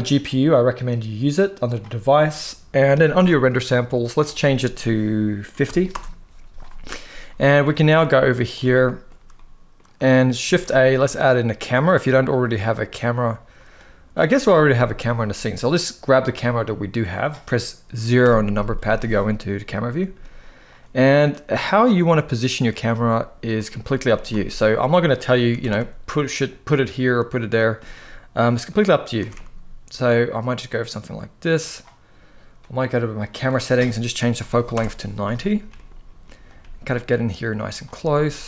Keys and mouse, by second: 0.0-1.5 drag, 4.0-5.6 drag, 7.0 middle click, 7.6 shift+middle click, 8.0 middle click, 8.4-9.5 shift+middle drag, 10.2 shift+a, 12.2-13.5 middle drag, 14.4 x, 15.7 click, 16.2-16.9 middle drag, 18.0 KP_0, 19.7 g, 20.4-21.7 drag, 22.7-23.4 drag, 23.8 r, 24.0 z, 25.3 r, 25.4 r, 27.5 g, 28.4 click, 28.9 r, 29.1 r, 32.3 click, 33.1-34.5 drag, 35.4 g, 35.5 middle click, 36.2 click, 36.3 g, 37.6 g.